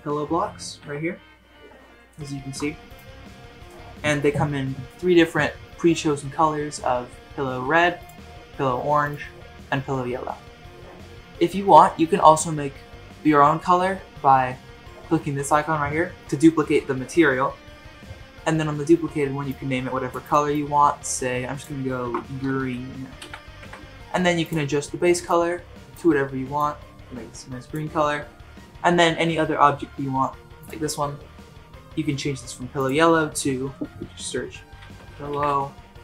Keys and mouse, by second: 0.8 z, 2.2 shift+middle drag, 2.9 click, 9.0 click, 19.5-23.6 drag, 22.6 e, 24.4 click, 30.6 click, 35.1 l.